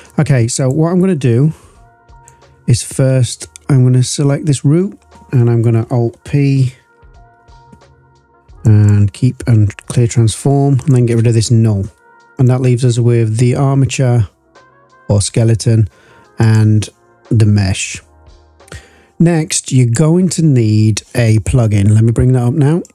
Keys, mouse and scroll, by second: 0.5 click, 2.1 click, 3.2 click, 7.3 alt+p, 10.8 click, 11.1 Delete, 12.3-13.8 drag, 16.4 click, 19.7 click.